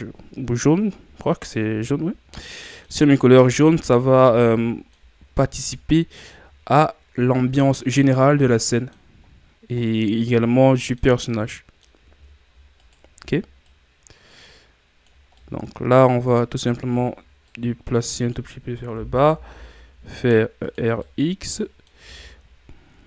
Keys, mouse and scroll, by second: 2.1 scroll down 2, 2.3-3.1 middle drag, 3.1-4.1 scroll up 5, 4.1 ctrl+scroll down 5, 4.3-5.1 middle drag, 5.1-5.6 ctrl+scroll down 1, 5.6-9.2 middle drag, 9.2-9.8 scroll down 2, 9.8-12.8 middle drag, 12.8-13.7 right drag, 13.7-15.3 drag, 15.3-18.9 middle drag, 18.9 r, 21.0-23.0 middle drag.